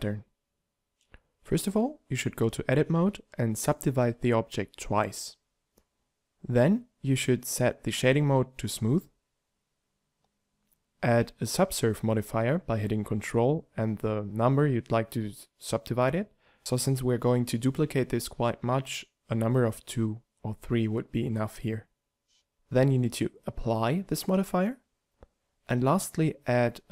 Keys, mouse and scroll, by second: 1.8 Tab, 2.4 w, 4.0 w, 5.5 Tab, 6.6 t, 12.5 ctrl+4, 13.2 ctrl+3, 13.9 ctrl+2, 14.6 ctrl+3, 15.2 ctrl+2.